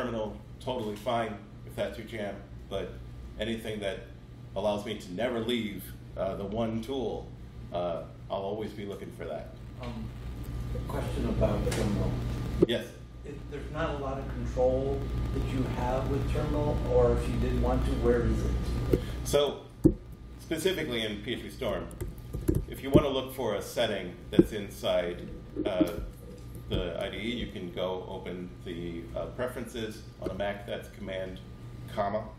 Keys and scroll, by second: 19.8 super+,, 21.4-23.4 typing.